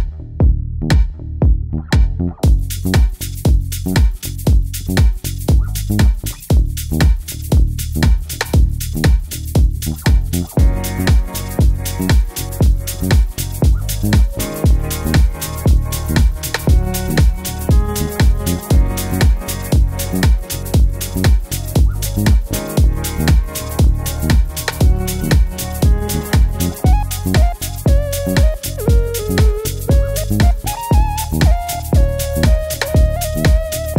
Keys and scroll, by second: 5.0-7.4 typing, 8.7-10.5 typing, 17.2 d, 18.9 super+v.